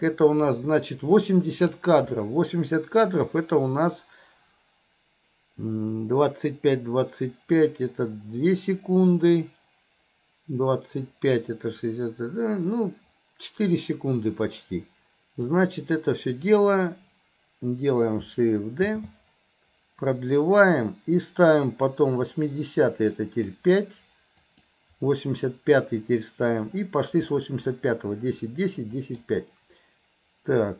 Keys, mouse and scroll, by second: 15.6-16.5 drag, 27.3-29.2 middle drag.